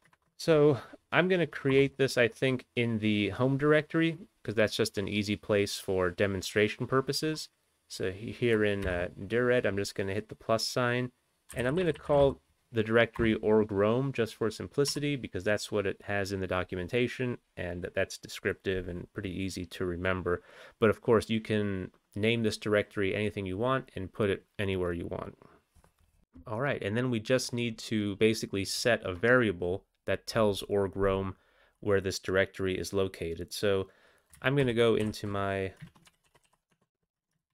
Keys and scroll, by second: 0.1 ctrl+BackSpace, 1.7 Return, 8.8 ±, 11.5-12.3 typing, 13.2 Return, 15.6 q, 34.6 ctrl+x, 35.1 ctrl+f, 35.9 ctrl+BackSpace, 36.0-36.6 typing, 36.9 Tab, 37.4 ctrl+n.